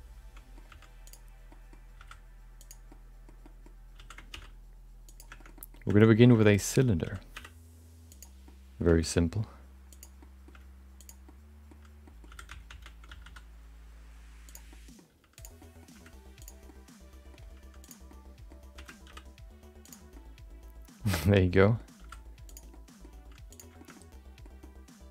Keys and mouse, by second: 0.8 g, 1.6 middle click, 1.9 s, 3.0 middle click, 3.5 middle click, 3.9 s, 5.6 middle click, 5.9 middle click, 6.2 middle click, 6.6 middle click, 7.0 s, 8.5 middle click, 10.1 r, 10.2 middle click, 10.5 g, 11.2 middle click, 12.0 middle click, 12.3 s, 14.7 middle click, 15.1 g, 15.6 middle click, 15.9 r, 16.6 middle click, 17.4 g, 18.1 middle click, 18.7 r, 20.2-21.8 middle drag, 22.7 middle click, 22.7 s, 23.7 g, 24.0 middle click, 24.6 middle click.